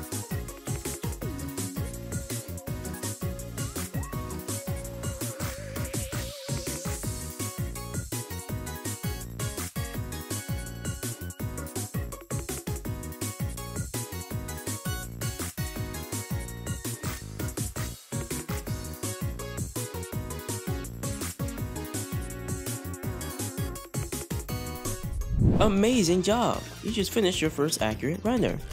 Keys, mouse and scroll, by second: 0.1 click, 1.5 click, 3.1-4.3 drag, 5.3-7.9 drag, 8.0-8.6 scroll down 2, 8.8-9.9 shift+middle drag, 10.2 shift+middle click, 11.4 drag, 11.7-12.3 scroll down 6, 11.9 middle click, 12.2 shift+middle drag, 12.4 scroll up 6, 12.6 middle click, 12.9-13.5 shift+middle drag, 13.6 scroll down 1, 13.7-14.2 middle drag, 14.2 scroll down 2, 14.3-15.6 middle drag, 15.7-16.5 middle drag, 16.7 click, 17.9 click, 18.7 click, 19.2 click, 24.8 click, 27.5 shift+middle click, 27.7 click, 27.8-28.4 scroll up 3, 28.6 shift+middle click.